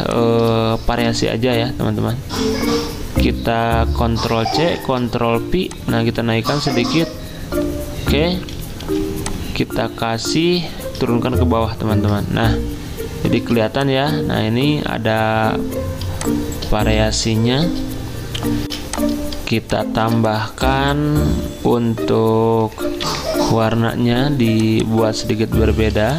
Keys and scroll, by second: 0.9 v, 4.3 ctrl+c, 4.7 ctrl+f, 8.8 i, 11.3 ctrl+i, 13.4 z, 14.1 z, 18.7 alt+Tab, 18.7 F9, 18.7 z, 23.0 F6.